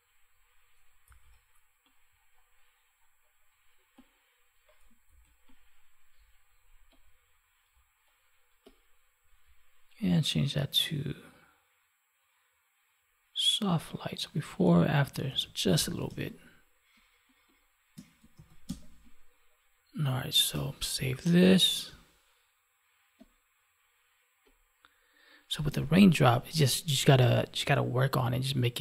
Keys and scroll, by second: 1.0 ctrl+z, 5.0 ctrl+z, 15.2 ctrl+s, 16.0 space, 18.3 ctrl+s, 18.6 space, 21.8 space.